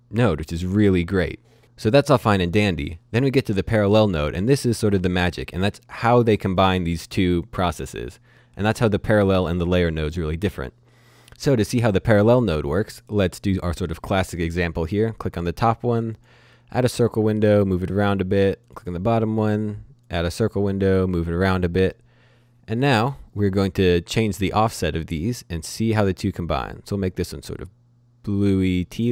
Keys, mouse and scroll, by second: 3.9 click, 12.7 click, 16.1 click, 24.8-29.1 drag.